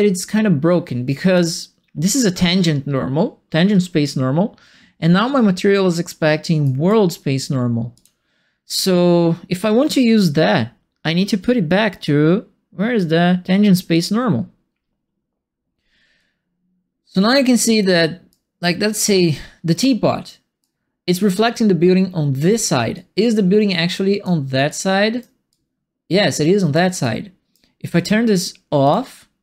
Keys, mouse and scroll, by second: 6.6 right click, 7.9 click, 13.9 click, 16.1-17.8 drag, 18.3-20.2 right drag, 20.6 right click, 22.9-24.2 drag, 24.6 right click, 25.4-26.7 drag, 27.0 right click, 28.8 click.